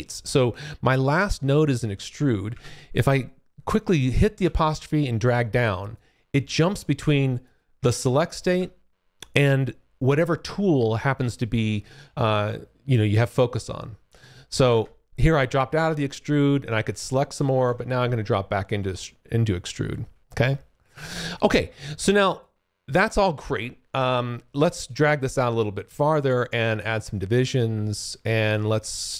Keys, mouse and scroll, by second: 2.5 `, 4.4 `, 5.9 click, 7.4 click, 17.7 `, 18.6 alt+click, 19.6 alt+middle click, 19.6-20.1 alt+scroll up 1, 24.8 click, 26.2-26.9 scroll up 1, 26.9-27.9 scroll up 7, 29.0 ctrl+shift+click.